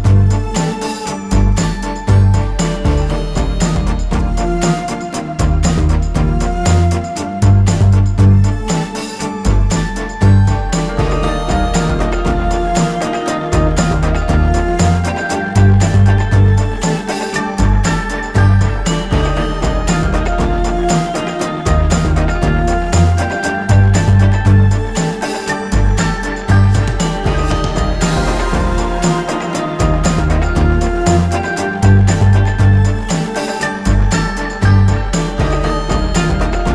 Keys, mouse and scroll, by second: 0.7 click, 1.5 ctrl+z, 2.2 click, 5.2 ctrl+g, 6.6-8.8 drag, 11.4 space, 11.6 click, 13.3 right click, 16.2 click, 19.1 click, 22.3 click, 26.6-30.1 shift+drag, 30.7 alt+scroll down 1, 30.8 alt+scroll up 1, 31.5 alt+scroll down 1, 31.7 alt+scroll up 1, 32.3 space, 32.8 click, 34.3-36.4 alt+shift+drag, 36.4 alt+scroll up 1.